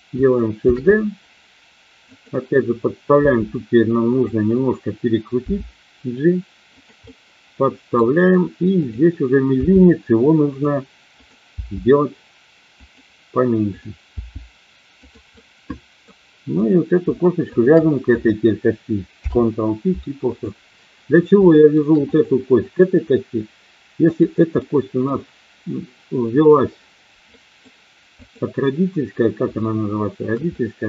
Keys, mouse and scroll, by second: 0.7 shift+d, 2.1 click, 3.2 r, 4.1 click, 5.5 g, 6.7 click, 7.0-8.0 middle drag, 8.8 click, 9.6 g, 10.5 click, 11.2 click, 11.6 g, 12.7 click, 14.1 g, 15.0 click, 15.3 middle click, 16.6 click, 19.1 ctrl+p, 21.5 shift+middle click, 22.1 click, 22.6 click, 24.1 click, 24.5 middle click, 27.3 middle click, 29.6 shift+middle click, 30.5 middle click.